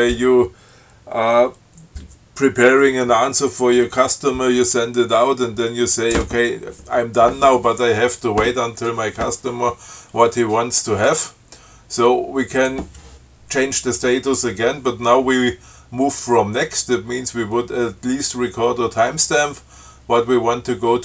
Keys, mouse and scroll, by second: 12.8 click.